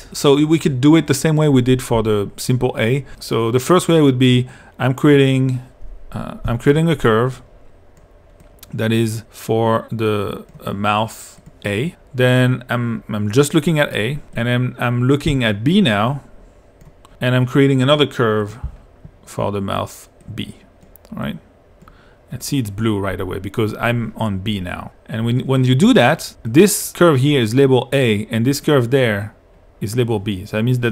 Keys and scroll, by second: 6.5 p, 15.3 2.